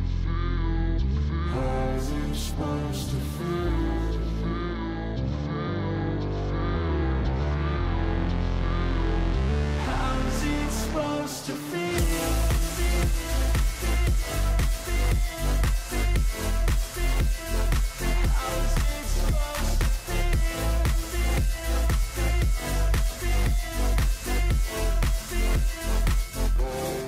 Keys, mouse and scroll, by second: 2.2 ctrl+h, 8.6 double click, 10.0 double click, 18.4 ctrl+j, 23.8 scroll down 4, 24.4 ctrl+j, 25.0 shift+click.